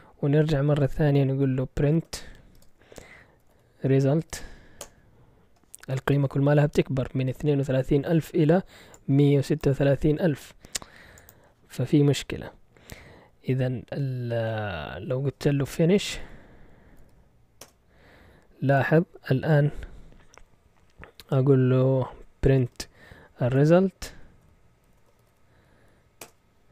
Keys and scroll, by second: 1.8-4.8 typing, 15.8-17.5 typing, 17.6 Return, 22.6-23.4 typing, 24.4-26.2 typing.